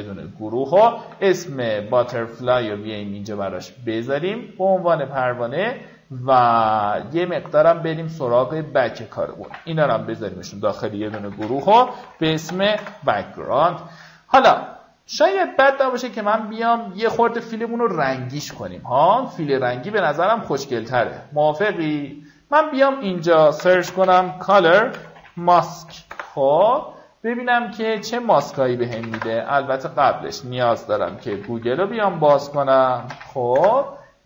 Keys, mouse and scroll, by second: 1.0 click, 2.1 click, 4.0-6.1 drag, 9.2 shift+click, 10.0 ctrl+g, 10.6 click, 11.4-13.7 typing, 14.5 click, 22.0 click, 23.9-27.0 typing, 28.2 click, 28.9-30.1 typing, 30.4 click, 31.3-34.2 typing.